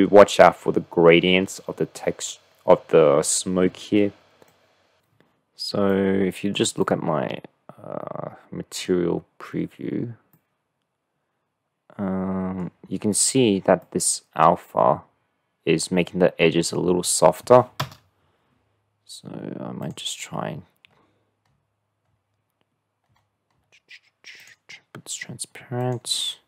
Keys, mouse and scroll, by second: 5.9 click, 6.9 click, 7.7 middle click, 8.0 click, 10.4-12.8 drag, 13.8 click, 17.8 KP_0, 19.9 click, 24.5 drag, 24.8 middle click, 25.9 click.